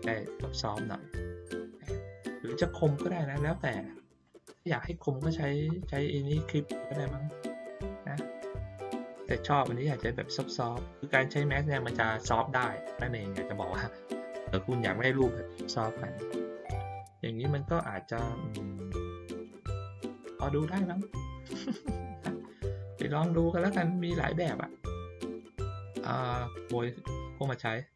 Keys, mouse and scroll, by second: 1.3 ctrl+middle click, 2.2 ctrl+middle click, 4.5 middle click, 5.4-8.0 ctrl+middle drag, 17.5-19.4 ctrl+middle drag, 17.5-18.5 ctrl+scroll down 2, 18.5-19.0 ctrl+scroll up 2, 19.0-19.4 ctrl+scroll down 2, 20.0 click, 24.2 middle click, 24.8 ctrl+scroll down 1, 25.7 click, 26.8-27.9 drag.